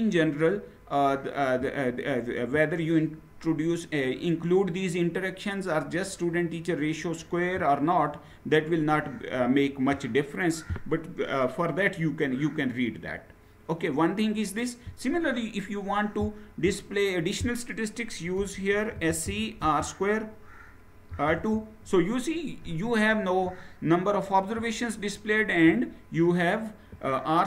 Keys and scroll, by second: 18.1-19.3 typing, 20.6-21.3 typing.